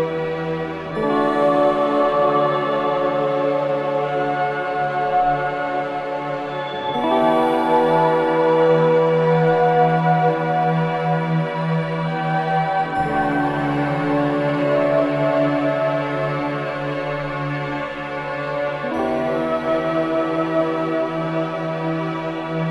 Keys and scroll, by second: 0.5 4, 3.3 3, 4.4 ctrl+d, 4.5 Escape, 7.6 ], 12.4 4, 15.5 2, 20.3 4, 21.6 2.